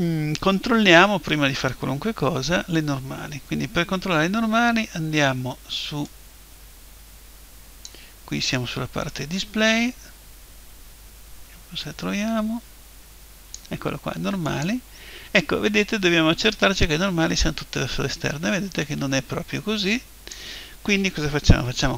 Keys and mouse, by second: 6.1 click, 9.1 click, 14.5 click, 16.8 click.